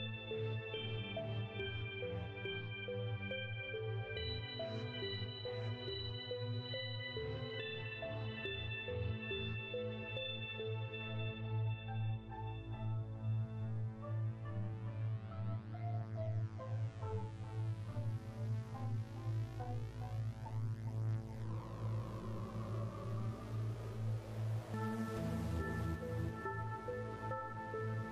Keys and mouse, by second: 1.1 KP_0, 3.9-5.5 right drag, 5.9 shift+d, 6.7 click, 9.4 s, 10.2 click, 11.4 click, 14.4 shift+d, 15.2 click, 16.5 click, 18.9 s, 20.1 click, 21.3 click, 22.3 click, 24.0 click, 25.3 click, 26.7 click.